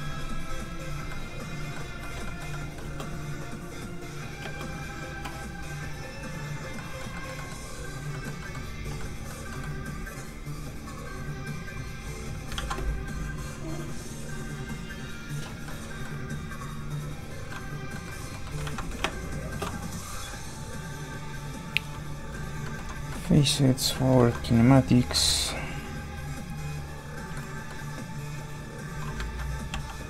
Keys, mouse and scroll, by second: 1.1 middle click, 2.1 shift+middle click, 2.8 shift+space, 5.9 click, 6.7 middle click, 7.1 shift+middle click, 7.3 middle click, 7.4 middle click, 8.1 middle click, 10.5 click, 12.5 ctrl+z, 15.6 ctrl+middle click, 15.7 middle click, 16.5 click, 17.5 middle click, 18.5 ctrl+middle click, 18.6 ctrl+z, 19.0 shift+space, 19.8 click, 21.5 click, 22.6 shift+middle click, 23.1 middle click, 23.2 middle click, 23.8 f, 23.9 click, 24.2 shift+middle click, 24.6 click, 25.3 ctrl+z, 26.0 click, 27.3 middle click, 28.6 click, 29.2 ctrl+z, 29.7-30.0 typing, 29.9 click.